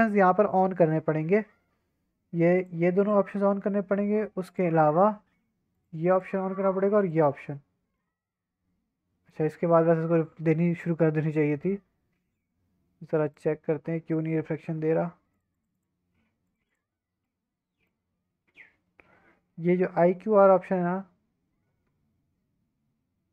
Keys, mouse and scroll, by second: 1.9-2.6 scroll down 1, 2.6 click, 3.0 click, 4.4 click, 5.7 click, 6.1 click, 7.0 click, 7.9-9.3 middle drag, 9.5 scroll up 2, 11.5-12.4 scroll down 3, 13.2 click, 13.7-15.0 scroll down 6, 15.3 click, 15.5 click, 15.7 click, 16.4 click, 16.7 click, 17.2-17.9 middle drag, 20.0-23.3 drag.